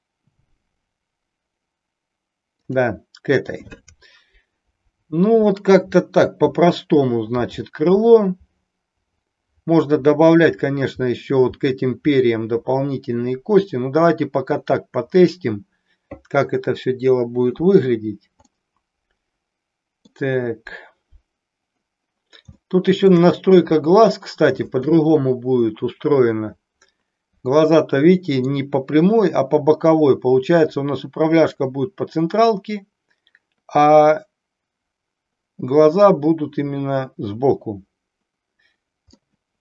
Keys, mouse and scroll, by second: 18.6-20.0 middle drag, 22.7 shift+middle click, 27.7-28.7 middle drag, 39.3-39.6 middle drag.